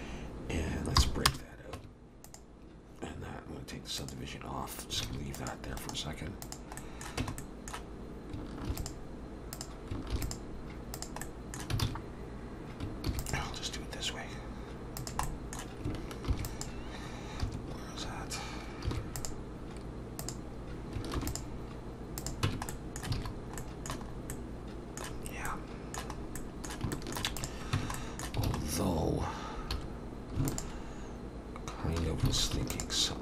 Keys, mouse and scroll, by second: 1.0 p, 1.8 Tab, 2.2 click, 4.0 click, 5.0 alt+a, 5.4 click, 5.8 right click, 6.8 middle click, 7.2 Tab, 7.4 middle click, 8.7 ctrl+r, 10.3 ctrl+r, 11.2 middle click, 11.8 alt+a, 13.1 ctrl+r, 15.2 middle click, 16.3 ctrl+shift+r, 17.4 Escape, 18.9 ctrl+r, 22.5 ctrl+r, 22.5 Tab, 22.7 middle click, 23.2 alt+a, 23.3-23.8 scroll down 2, 23.6 middle click, 24.1 scroll up 1, 24.3 middle click, 25.2 scroll down 2, 25.5 middle click, 26.1-26.6 scroll up 3, 26.4 middle click, 26.9 shift+middle click, 27.4 click, 27.8 Tab, 28.0 middle click, 28.5 alt+a, 28.6 scroll up 2, 29.7 2, 30.5 alt+shift+click, 32.3 alt+a, 32.7 alt+shift+click.